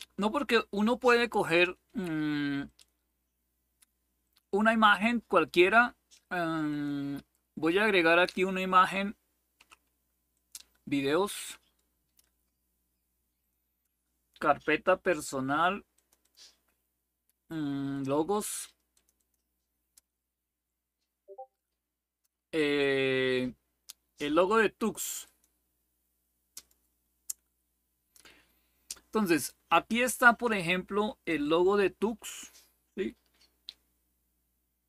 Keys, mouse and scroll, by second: 0.0 click, 2.4 click, 3.0 click, 3.9 click, 6.4 click, 10.0 click, 13.1 click, 15.6 click, 16.0 click, 17.7 click, 18.3 click, 18.7 click, 20.2-21.0 scroll down 1, 21.0-23.6 scroll up 1, 24.9 click, 26.2 click, 29.6 click, 31.1-34.8 drag.